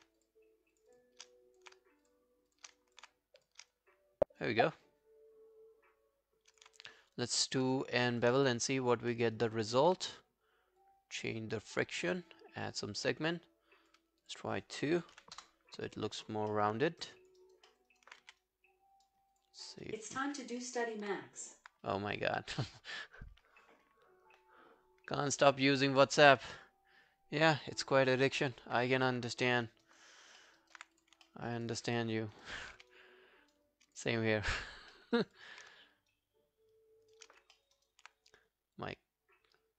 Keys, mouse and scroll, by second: 0.2 shift+click, 0.8 shift+click, 1.3 alt+click, 2.1 shift+click, 2.5 shift+click, 2.8 alt+click, 3.4 shift+click, 3.7 alt+click, 6.9 shift+right click, 8.6 alt+click, 9.1 alt+middle click, 9.4 alt+right click, 15.1 alt+right click, 15.4 Return, 16.5 alt+middle click, 16.8 alt+scroll down 1, 17.0 alt+click, 17.4 alt+right click, 17.7 alt+middle click, 17.9 alt+right click, 18.2 w, 18.4 right click, 19.6 scroll down 1, 19.8 alt+click, 20.6 alt+middle click, 29.6 alt+middle click, 29.9 alt+right click, 30.1 alt+click, 30.4 alt+middle click, 30.6 alt+right click, 31.3 alt+middle click, 31.5 alt+right click, 31.7 alt+click, 32.0 alt+middle click, 32.2 alt+right click, 32.5 alt+click, 32.8 q, 32.9 right click, 34.0 double click, 34.4 alt+scroll down 1, 34.5 alt+click, 34.9 alt+middle click, 35.2 alt+right click, 35.4 alt+click, 36.1 shift+right click, 37.6 alt+middle click, 37.8 alt+right click.